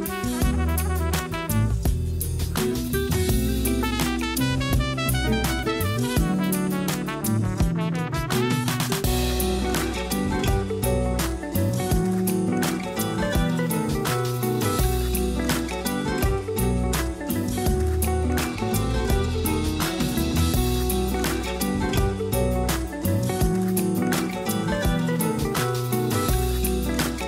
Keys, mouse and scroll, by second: 0.5-1.4 middle drag, 1.4-1.9 scroll up 2, 1.9-2.4 shift+middle drag, 2.4-2.8 scroll up 1, 2.8 a, 3.5 Tab, 3.7 click, 4.4 Tab, 4.9 click, 5.6 Tab, 6.0 a, 6.2 a, 6.9 ctrl+r, 10.1 a, 10.3 a, 10.5-11.3 scroll down 1, 11.3-12.4 middle drag, 12.4 ctrl+r, 14.2 a, 14.4 a, 15.5 click, 15.7 click, 16.3 ctrl+x, 17.4-18.7 middle drag, 18.7 click, 18.9 click, 19.4 ctrl+x, 19.7-20.4 scroll down 2, 19.9 a, 20.1 a, 20.4 Tab, 20.7 a, 20.9 a, 21.4-21.9 middle drag, 21.9-22.6 scroll up 1, 22.6-23.3 shift+middle drag, 23.3 scroll down 2, 23.7-24.8 shift+middle drag, 24.8 scroll down 1, 25.3 KP_1, 25.9 a, 26.1 a, 26.7-27.2 shift+middle drag.